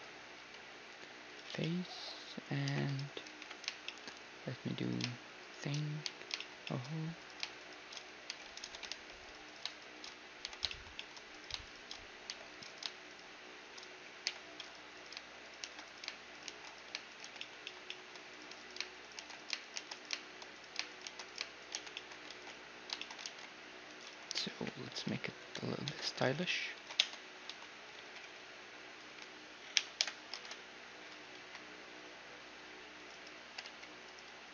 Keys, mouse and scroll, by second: 0.4 x, 1.5 z, 1.6-3.4 middle drag, 2.7 KP_1, 3.4 KP_3, 3.8-6.1 middle drag, 4.8-6.1 drag, 6.1-24.1 right drag, 6.1 j, 6.4-8.6 drag, 8.3 j, 8.6 a, 8.9 ctrl+r, 10.5 j, 10.7 click, 11.3-14.3 middle drag, 12.4 j, 14.3 j, 15.6 shift+r, 16.5 shift+r, 17.3 shift+r, 17.4-19.8 drag, 19.2 shift+r, 19.8 shift+r, 21.1 shift+r, 21.8 shift+r, 22.0-23.1 drag, 22.3 ctrl+s, 23.3 ctrl+r, 24.1 middle click, 24.6-25.9 right drag, 24.6-28.0 typing, 25.9 Tab, 25.9 middle click, 27.0 Tab, 27.8-30.9 middle drag, 29.8 ctrl+i, 30.0 h, 30.4 ctrl+Tab, 31.4 c, 33.8 g.